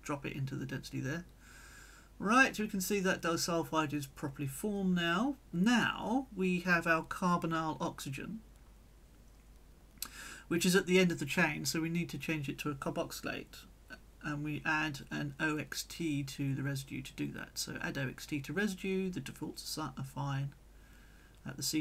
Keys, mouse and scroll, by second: 0.0-1.3 drag, 2.1 click, 2.8-4.9 drag, 5.2 click, 6.3-7.4 drag, 7.8 click, 9.1-10.9 drag, 13.8 click, 14.5 click, 15.6 click, 19.1 click, 19.9 click, 20.3 click, 20.9 click.